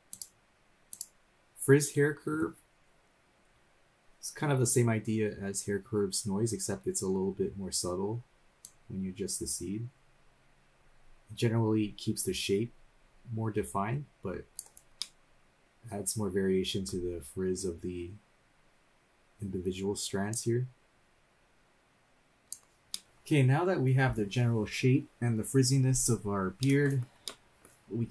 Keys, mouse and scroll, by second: 0.1 click, 0.9 click, 7.3-7.6 scroll up 2, 8.6-14.6 drag, 15.0-16.9 middle drag, 20.3-22.6 drag, 22.9 middle click, 23.4-24.0 scroll up 1, 24.0-24.6 scroll up 2, 26.6 middle click, 27.2-27.7 shift+middle drag, 27.8-28.1 scroll up 2.